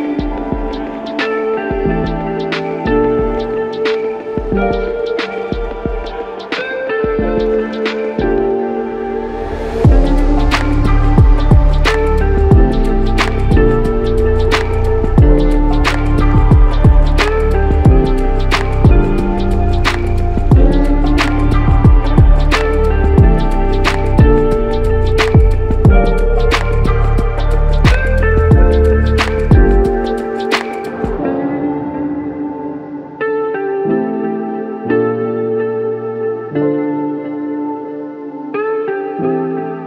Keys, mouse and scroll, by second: 4.5 shift+click, 6.6 shift+click, 12.3 shift+click, 18.9 alt+click, 22.1 alt+click, 22.1 alt+click, 27.7 alt+click, 29.2 alt+click, 33.0 alt+click.